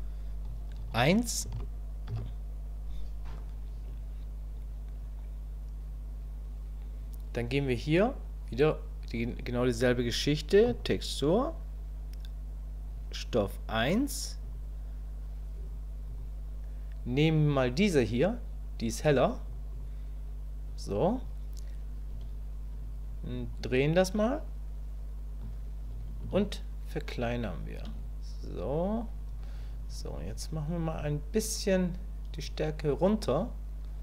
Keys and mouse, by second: 0.9 1, 14.4 click, 23.6-25.4 ctrl+drag, 26.3-27.8 shift+drag, 32.5-34.0 drag.